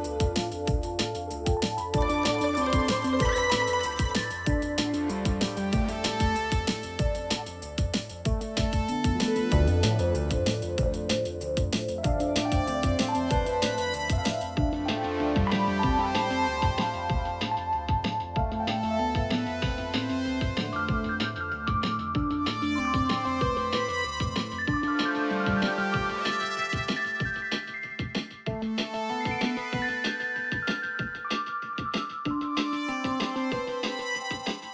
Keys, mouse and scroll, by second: 1.2 double click, 8.9 o, 11.1 space, 11.5 alt+w, 11.8 space, 12.1 double click, 12.3 space, 13.5 t, 14.2 ctrl+a, 14.9-15.9 typing, 16.9 9, 18.2 Home, 18.8 shift+4, 24.7 double click, 27.7 ctrl+shift+], 28.3-28.6 alt+scroll up 1, 30.4 alt+scroll up 1, 30.9-31.2 alt+scroll down 1, 32.2 shift+click.